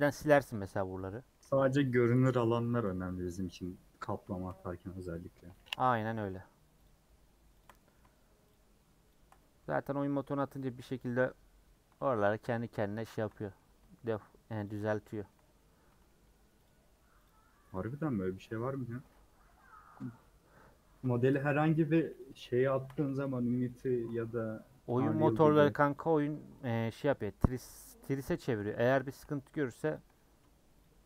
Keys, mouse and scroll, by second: 0.6 scroll up 2, 0.9 scroll down 1, 1.1 middle click, 1.8 click, 2.1 middle click, 2.7 shift+click, 3.6 middle click, 3.9 scroll up 1, 4.3 shift+middle click, 4.6-5.7 scroll up 1, 5.7 click, 6.1 middle click, 6.8 shift+click, 7.6 shift+click, 7.7 middle click, 8.5 shift+click, 9.1 shift+click, 9.4-10.8 middle drag, 10.8-11.9 scroll up 1, 11.9 scroll up 1, 12.1 shift+Left, 13.2 shift+Left, 13.3 middle click, 14.1 shift+Left, 14.6 shift+Left, 14.8 middle click, 15.4-15.9 scroll up 1, 15.9 middle click, 16.6 shift+click, 17.2 shift+click, 17.7 shift+click, 17.9 middle click, 18.3 scroll down 3, 18.5-21.1 shift+middle drag, 21.1-21.6 scroll up 1, 21.6-22.2 scroll up 1, 22.2 shift+Left, 22.7 shift+Left, 22.9 middle click, 23.6 shift+Left, 23.8 shift+middle click, 24.5 scroll up 1, 25.1 shift+click, 25.3 middle click, 25.9 shift+click, 26.6 shift+click, 26.8 middle click, 27.6 shift+click, 28.5 shift+click, 28.7 middle click, 29.3 scroll up 2, 29.9 shift+click, 30.1 middle click, 30.8 shift+Left.